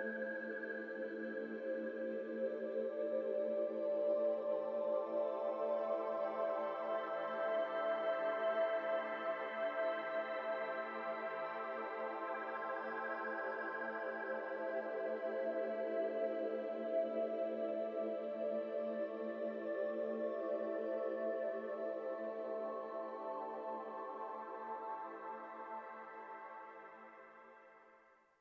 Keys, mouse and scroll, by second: 1.1-1.5 middle drag, 1.5 Tab, 1.7 middle click, 1.8-2.1 scroll down 1, 2.1 2, 2.3 click, 2.7 e, 4.0 3, 4.3 click, 5.6-7.6 drag, 8.7 click, 9.3-10.4 drag, 10.4 Tab, 10.4 scroll down 2, 10.6 middle drag, 10.9 z, 11.3-11.9 middle drag, 11.9 z, 12.4-14.4 shift+middle drag, 14.4 z, 14.9-15.5 shift+middle drag, 15.2 z, 15.5 z, 15.9 middle drag, 16.1 scroll up 2, 16.3-18.2 middle drag, 18.2 Tab, 18.3 middle click, 18.7 click, 18.9 3, 19.0 3, 20.4-22.5 drag, 22.5-24.6 scroll down 3, 24.6-26.2 scroll down 1.